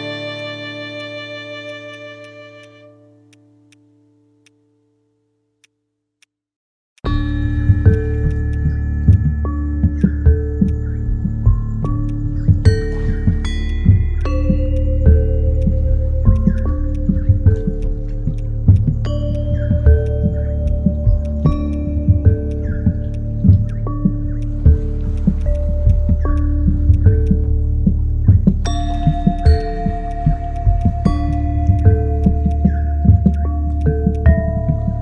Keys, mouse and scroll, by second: 0.0-0.1 typing, 11.6 typing, 13.4 typing, 19.8-20.6 typing, 25.4 right click, 28.5-29.2 typing, 31.8 typing.